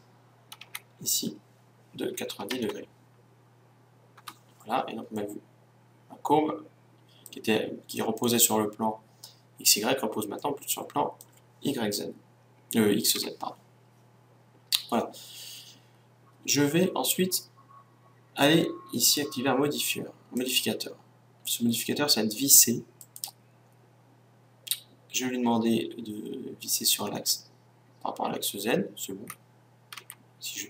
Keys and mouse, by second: 5.1-13.3 middle drag, 13.3 KP_1, 18.9-22.2 drag, 29.9 Tab.